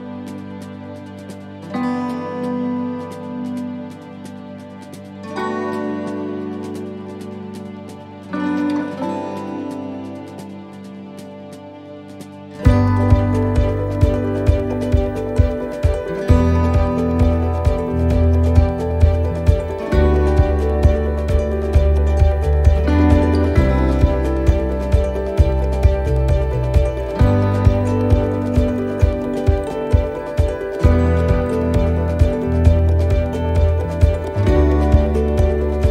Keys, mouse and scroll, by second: 0.2 click, 1.0 middle click, 2.5 click, 3.7 middle click, 5.7 click, 11.4 click, 11.7 scroll up 1, 11.9 middle click, 14.3 shift+middle click, 14.9 middle click, 17.1 click, 19.1 click, 20.1 click, 23.2 shift+middle click, 23.2 shift+scroll up 1, 24.0 middle click, 26.0 click, 27.2 middle click, 30.4 scroll down 2, 30.8 middle click, 31.2 scroll up 3, 31.7 shift+middle click, 32.4 middle click, 32.8 scroll up 1, 34.0 click, 35.6 middle click.